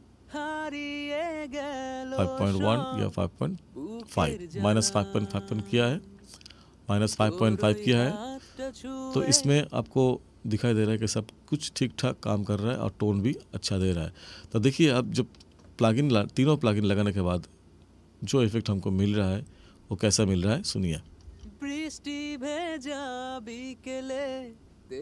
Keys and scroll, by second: 9.7 space, 21.2 space.